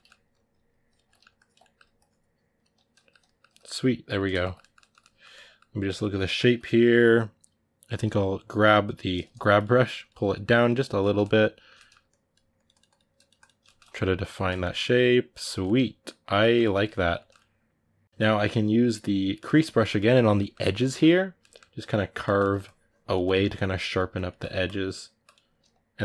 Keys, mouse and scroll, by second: 0.1 ctrl+click, 0.9 ctrl+middle click, 1.1 ctrl+click, 1.4 middle click, 1.7 ctrl+click, 2.7-7.8 ctrl+middle drag, 7.8 g, 8.0 g, 9.4-10.8 drag, 10.8-11.9 ctrl+middle drag, 11.9-13.4 drag, 13.4-19.2 ctrl+middle drag, 19.2 click, 19.6-21.5 middle drag, 21.5 click, 22.0 ctrl+middle click, 22.4 click, 23.0 ctrl+middle click, 23.2-26.0 drag.